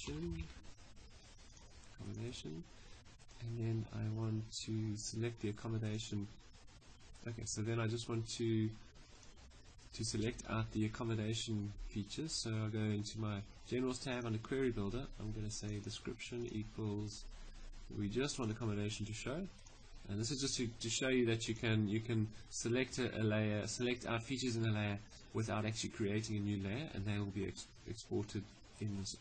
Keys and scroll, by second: 0.0-0.6 typing.